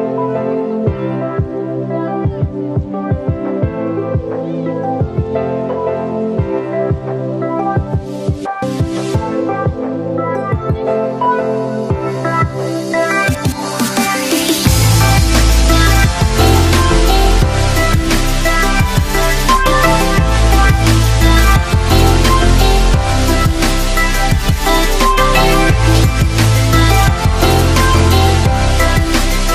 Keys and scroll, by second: 10.3 Up, 13.3 Up, 20.9 Down, 25.0 Down.